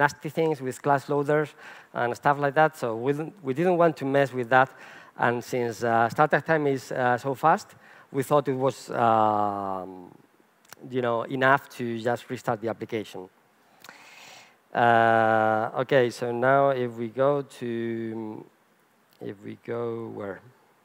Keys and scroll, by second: 15.2 super+1, 19.2 super+1.